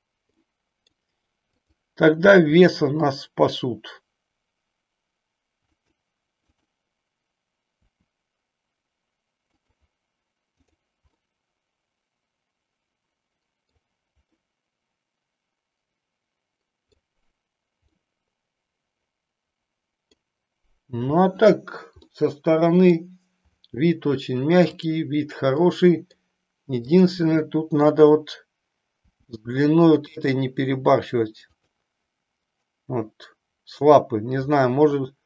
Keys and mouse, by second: 0.4 middle click, 1.4-3.1 drag, 3.3 r, 5.8 click, 6.5 click, 8.1 r, 9.6 click, 10.6 click, 11.1-13.8 middle drag, 14.3-17.0 middle drag, 17.9-20.1 middle drag, 22.0-23.0 middle drag, 24.6 click, 25.6 middle click, 26.8 click, 28.9 g, 31.6 click.